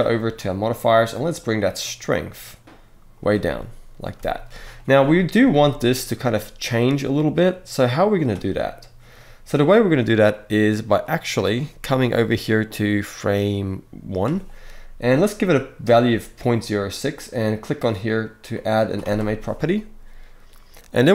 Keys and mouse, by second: 0.1 click, 1.2-2.9 drag, 4.0 shift+drag, 4.0 shift+middle drag, 5.3-8.0 shift+drag, 10.7 click, 11.6-14.0 drag, 18.8 click.